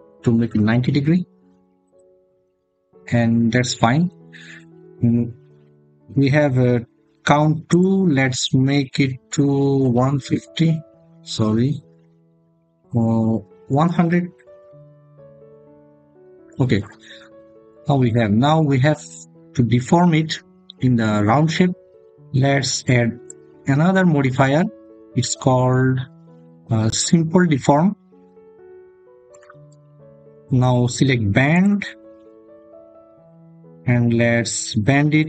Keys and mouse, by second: 0.3 Return, 3.9 Tab, 7.6-15.4 drag, 11.1 BackSpace, 13.7 0, 23.2-27.8 drag, 32.2 click.